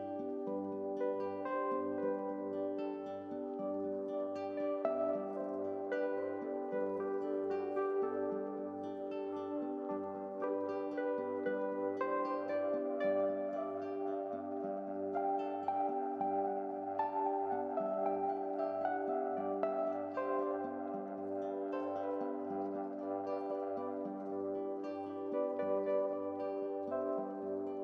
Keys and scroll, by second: 2.5 7.